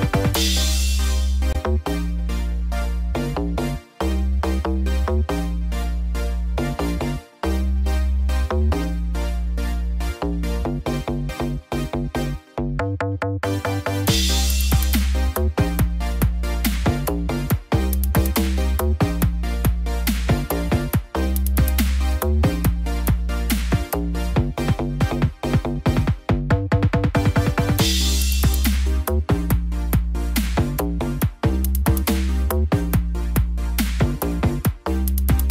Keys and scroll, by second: 4.5 ctrl+t, 9.7 ctrl+-, 13.6 ctrl+0.